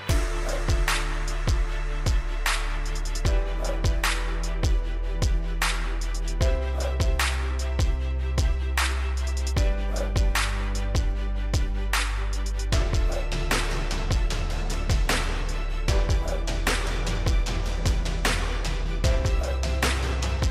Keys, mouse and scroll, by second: 0.1 right click, 1.3 click, 1.9-2.9 scroll down 1, 2.9 click, 6.2 8, 6.7 Return, 7.9 click, 8.6 right click, 9.3 click, 9.9 scroll up 1, 10.5 scroll down 1, 14.8-16.1 scroll up 1, 16.1 click.